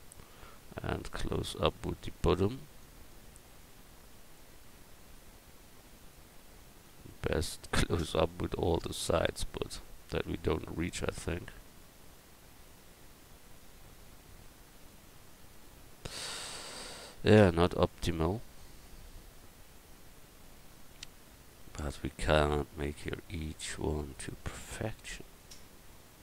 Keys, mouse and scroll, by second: 2.8-4.7 drag, 6.8 middle click, 10.5 middle click, 10.6-12.6 drag, 18.1-20.4 drag, 24.0 Tab.